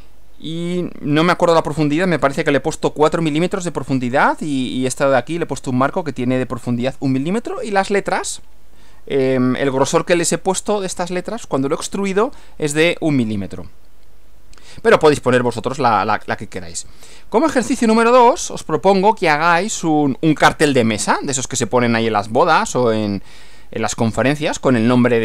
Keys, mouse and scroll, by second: 14.8-15.6 scroll up 2, 16.2 scroll down 2, 17.2 Right.